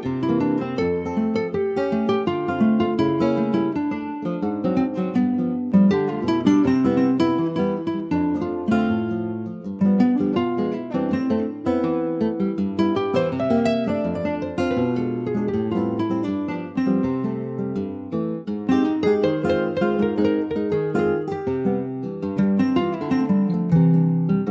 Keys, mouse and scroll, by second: 0.2 shift+middle click, 0.9 3, 1.0 click, 1.4-2.6 middle drag, 2.6 click, 3.9-6.0 middle drag, 6.0 click, 7.3 middle click, 8.1 i, 11.8 middle click, 12.4 e, 14.6-16.2 middle drag, 16.2 2, 16.6 click, 17.2 alt+shift+click, 17.7 middle click, 18.3 ctrl+b, 23.6 click.